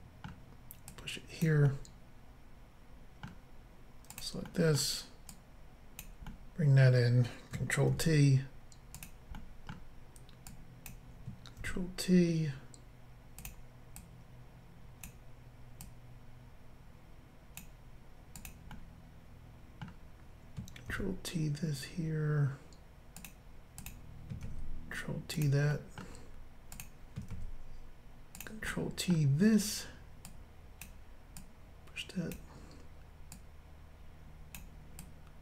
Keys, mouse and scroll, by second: 0.9 click, 1.8 middle click, 4.1 click, 4.2 click, 4.5 middle click, 5.3 click, 7.9 ctrl+t, 9.0 click, 9.4 middle click, 10.5 click, 11.7 ctrl+t, 13.4 click, 13.5 click, 14.0 click, 15.8 click, 18.4 click, 18.5 click, 18.7 middle click, 20.9 ctrl+t, 23.2 click, 23.3 click, 23.8 click, 23.9 click, 24.5 ctrl+t, 25.4 click, 25.7 middle click, 26.8 click, 28.4 click, 28.6 ctrl+t, 28.7 middle click, 30.3 click, 31.4 click, 33.4 click, 35.0 click.